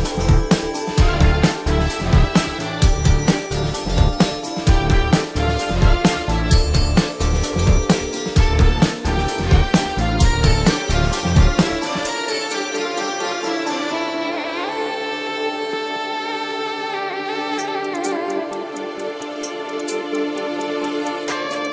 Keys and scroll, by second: 1.5 ctrl+-, 1.7-4.6 typing, 5.5 ctrl+-, 7.2 ctrl+-.